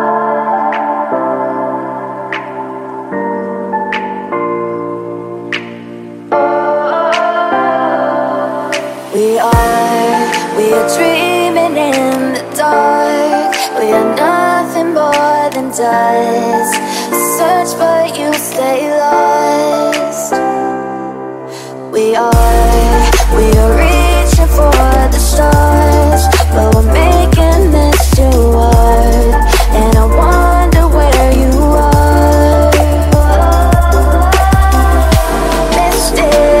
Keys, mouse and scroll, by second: 0.3 F10, 0.5 right click, 1.5 click, 4.1-5.4 typing, 6.3 right click, 7.4-9.9 drag, 9.7-11.0 typing, 11.5 click, 12.5 F10, 13.4 click, 15.0-16.1 typing, 16.3 Return, 18.4 click, 22.8 1, 22.9 Return, 24.2-28.8 drag, 29.0 shift+0, 29.2 shift+0, 29.4 Return, 30.4-33.6 drag, 33.6 F10, 33.9 right click, 35.1 click.